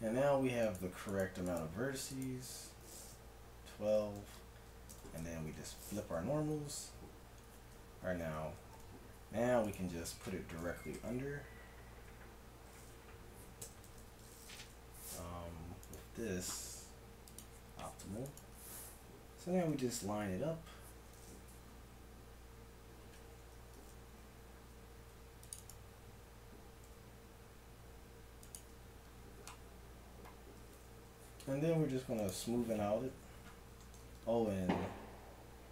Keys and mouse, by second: 3.9 a, 4.2 a, 4.9 ctrl+n, 5.5 KP_1, 7.1 KP_Divide, 7.7 Tab, 8.1 z, 8.8 KP_1, 10.4 g, 13.9 z, 15.9-17.3 right drag, 17.3-19.3 drag, 17.4 right click, 18.2-20.2 right drag, 19.4 g, 23.1 Tab, 24.0 z, 25.0 ctrl+r, 26.9 s, 28.7 Tab, 31.0 t, 32.2 click, 33.0 Tab, 33.8 click.